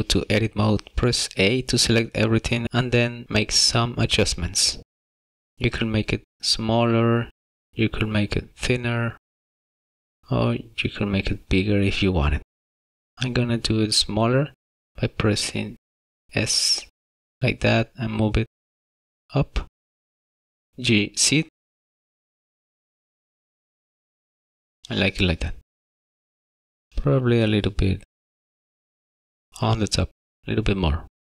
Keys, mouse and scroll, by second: 0.2 Tab, 1.7 a, 4.4 s, 16.2 s, 18.4 Tab, 19.8 g, 20.7 z, 25.6 middle click, 31.1 KP_1.